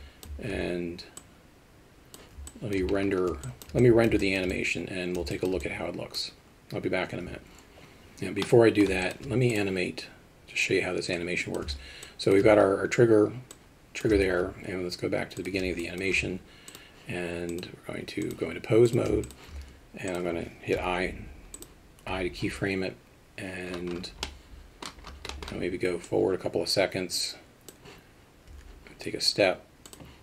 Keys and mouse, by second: 0.0 alt+middle drag, 1.3-2.4 drag, 2.5 alt+shift+middle drag, 3.5 alt+shift+middle drag, 3.8 alt+middle click, 4.2 shift+middle drag, 4.5-5.2 alt+middle drag, 5.4 alt+shift+middle drag, 5.7 alt+middle click, 8.5 middle click, 9.1 alt+shift+middle drag, 11.2 click, 12.1 alt+shift+middle drag, 13.5 click, 16.0 alt+shift+middle click, 17.5 click, 19.3 shift+middle click, 24.3 middle click, 25.3 middle click, 26.1-30.2 drag.